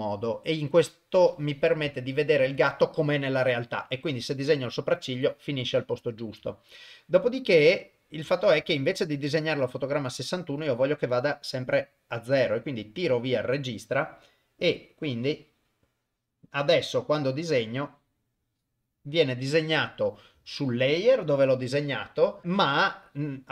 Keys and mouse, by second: 1.9 shift+middle click, 4.0 click, 8.3 ctrl+z, 12.9 click, 15.1-16.3 drag, 17.6-18.7 drag.